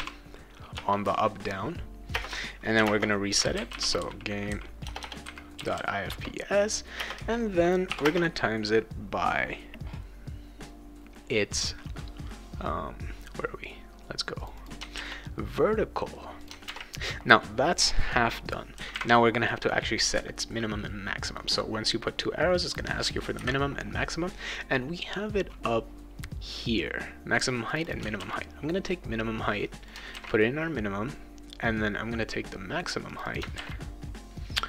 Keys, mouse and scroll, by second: 0.7 Return, 2.1-5.8 typing, 6.1 Return, 7.0 space, 7.9 shift+8, 8.0 space, 14.4 click, 14.6 click, 16.4 click, 18.7 ,, 27.7 click, 27.9 click, 29.9 click, 33.1 click.